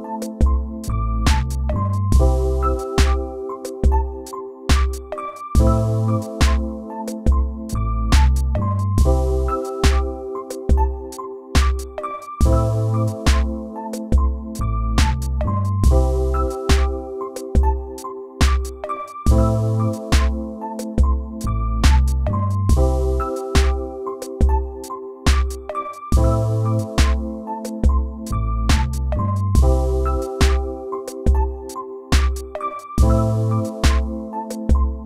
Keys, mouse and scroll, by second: 12.2 right click, 18.4 right click, 19.8 right click, 20.6 right click, 22.2 right click, 22.6 right click, 23.3 right click, 23.7 right click, 24.2 right click, 25.0 right click, 25.9 right click, 31.2 right click, 33.1 right click.